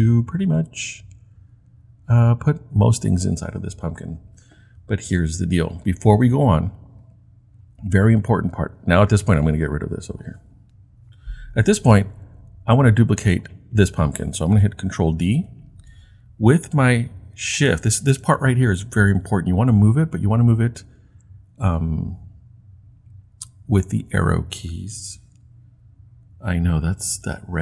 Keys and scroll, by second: 11.0 Delete, 15.1 super+d, 22.0 shift+Left, 22.5-24.6 typing.